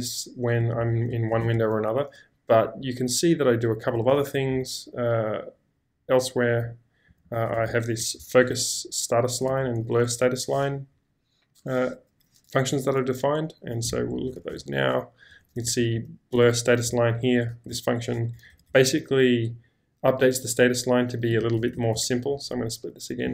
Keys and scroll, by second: 0.8 ctrl+k, 1.4 ctrl+j, 4.0 typing, 6.8-10.8 typing, 13.9 Escape, 14.0 Escape, 14.5-17.7 typing, 19.9 typing, 21.1-22.2 typing.